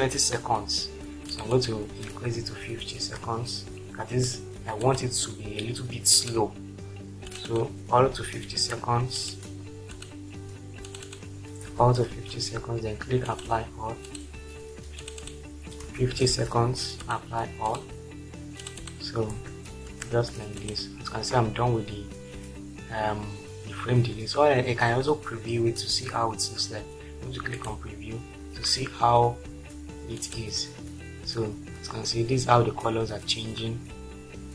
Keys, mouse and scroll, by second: 2.5-3.0 typing, 4.8 click, 8.5 typing, 9.9 click, 11.7-12.1 typing, 15.8-17.7 typing, 17.1 click, 17.7 click, 19.4-19.9 typing, 21.1 typing, 27.6 click, 30.2 click.